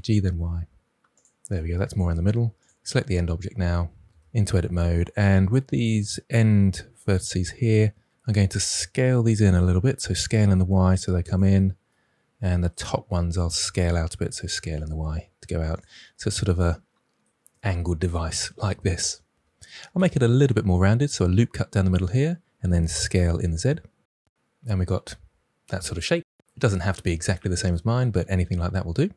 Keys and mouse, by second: 0.0 y, 2.5 click, 4.1 Tab, 9.2 s, 10.0 y, 11.2 click, 14.3 s, 14.7 y, 15.7 click, 20.0 ctrl+r, 21.9 click, 22.0 click, 22.7 s, 23.0 z, 24.4 click.